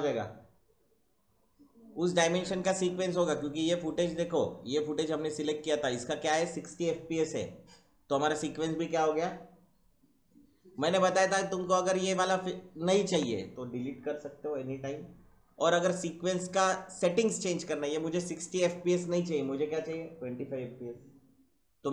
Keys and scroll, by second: 13.1 Delete.